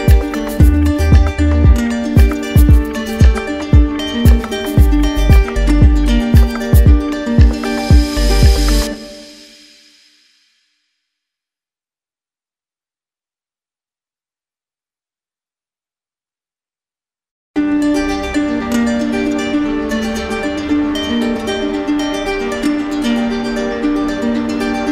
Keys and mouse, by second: 3.4-4.5 drag, 4.9-5.9 drag, 6.9-8.0 drag, 9.4 click, 9.7 ctrl+z, 10.2 ctrl+z, 11.8 click, 12.8 ctrl+z, 20.6 shift+click, 20.9 ctrl+z, 22.8 ctrl+d.